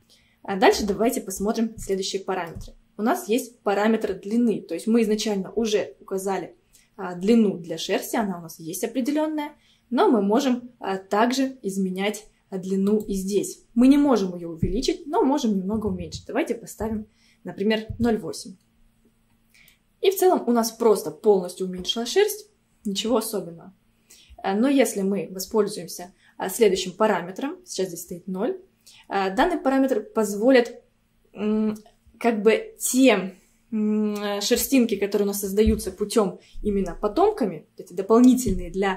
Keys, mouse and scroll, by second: 0.3-2.0 scroll down 1, 2.0-5.1 shift+middle drag, 12.9-16.1 drag, 19.4-19.7 scroll down 1, 19.7-22.7 middle drag.